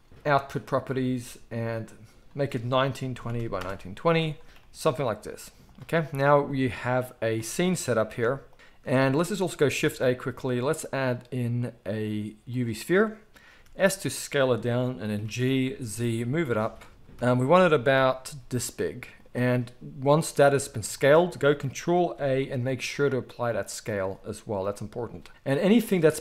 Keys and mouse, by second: 2.2-3.6 drag, 2.2-5.7 middle drag, 4.6 g, 5.7-8.0 right drag, 6.3 g, 8.1 ctrl+b, 8.1-25.1 ctrl+right drag, 9.8 shift+a, 13.5 s, 15.1 g, 17.1 KP_1, 18.2 s, 22.1 ctrl+a, 24.6 g, 25.1 middle click, 25.8 click, 25.9-26.2 middle drag.